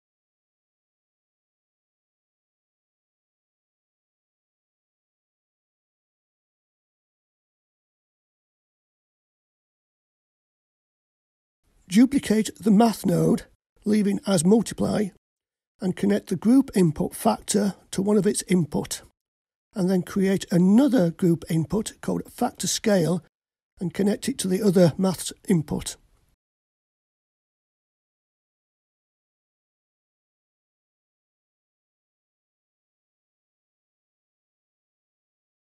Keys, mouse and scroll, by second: 7.7-10.7 drag, 12.1 click, 13.6 shift+d, 14.9 click, 17.4-20.5 drag, 21.9-24.8 drag, 28.7-29.4 scroll down 1, 29.4-30.0 scroll down 2, 30.0 click, 31.5-35.6 drag.